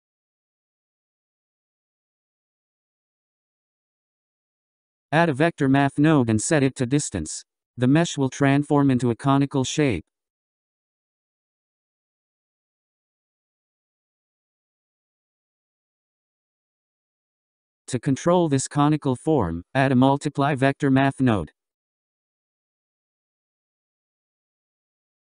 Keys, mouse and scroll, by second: 1.0 scroll down 4, 1.5-4.6 middle drag, 4.6-5.7 scroll up 3, 5.7 shift+a, 9.7-11.0 scroll up 3, 11.0-14.0 drag, 14.2-15.7 drag, 15.7-17.8 middle drag, 17.8 click, 19.0 click, 20.7-21.1 scroll down 6, 22.0 click, 23.4 shift+d, 25.1 click.